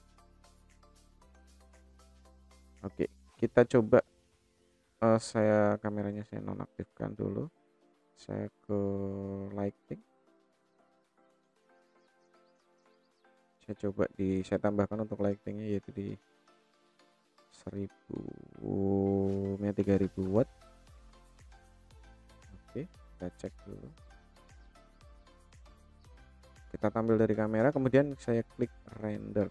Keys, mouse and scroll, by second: 0.4 shift+middle click, 5.6 click, 6.4 KP_0, 7.4-7.8 middle drag, 7.9 scroll down 1, 9.1 click, 9.1 scroll down 2, 9.6-10.1 middle drag, 10.6-12.2 shift+drag, 12.3-13.2 drag, 13.2-13.8 middle drag, 14.6-15.3 drag, 17.0-21.7 drag, 19.7 KP_0, 21.8 middle click, 23.6 scroll up 2, 24.8-25.2 scroll up 4, 25.2 middle click, 26.2 KP_0, 28.3-29.5 drag.